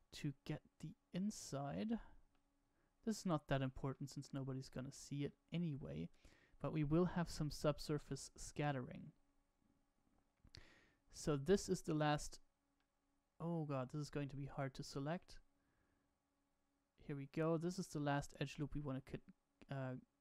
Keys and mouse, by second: 0.4-1.4 middle drag, 1.9 middle click, 3.8 shift+middle click, 5.2-7.7 middle drag, 8.0-11.4 middle drag, 12.7-17.0 middle drag.